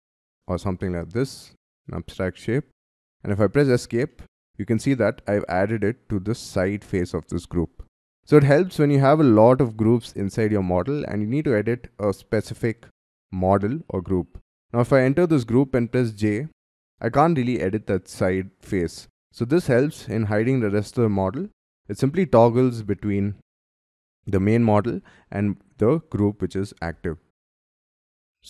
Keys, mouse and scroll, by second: 0.8 double click, 1.3 double click, 1.6 middle click, 2.7 scroll down 2, 3.3 Escape, 4.1 middle click, 4.7 scroll down 7, 7.8-8.2 scroll down 13, 8.2 scroll up 6, 8.6 scroll down 7, 10.4 scroll down 4, 11.0-14.5 scroll up 7, 15.1 double click, 15.4-15.8 scroll down 3, 15.8-16.2 scroll up 3, 16.6 j, 16.7-19.6 scroll up 2, 19.6 j, 20.6-21.0 scroll down 3, 21.4-23.0 typing, 24.3 scroll down 4, 24.8-26.5 scroll up 4, 26.8 j, 27.7-28.1 scroll down 11.